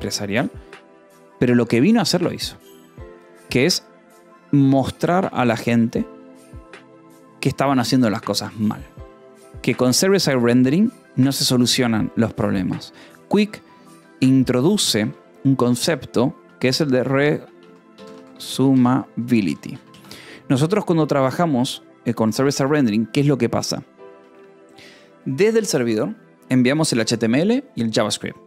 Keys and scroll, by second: 14.3 o, 14.6 BackSpace, 14.9 Return, 16.9-19.9 typing, 20.5 ctrl+s.